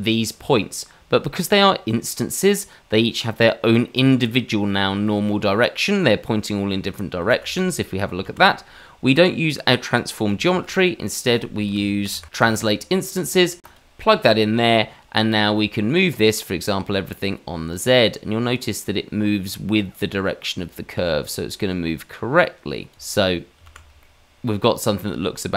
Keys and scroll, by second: 7.2 shift+z, 8.2 shift+z, 10.4 shift+a, 11.7 BackSpace, 22.9 shift+z, 23.6 shift+z.